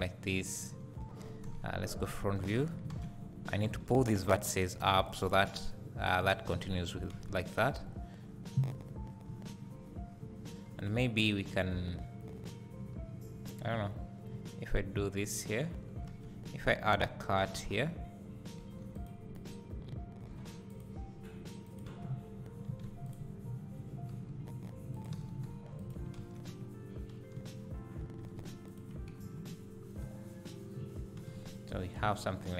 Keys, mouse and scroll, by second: 0.8 1, 1.6 KP_1, 2.4 z, 3.0 alt+a, 3.7 b, 5.0-10.9 drag, 7.1 alt+a, 9.3 z, 16.2 alt+a, 17.4 j, 18.6 k, 19.5 right click, 20.3 k, 22.0 space, 22.7 alt+a, 23.0 click, 24.1 g, 25.2 alt+a, 25.5 3, 25.8 click, 26.2 ctrl+x, 27.4 2, 28.3 alt+a, 28.7 click, 29.4 ctrl+x, 29.8 scroll down 2, 30.0 `, 31.2 alt+a, 31.8 scroll down 1.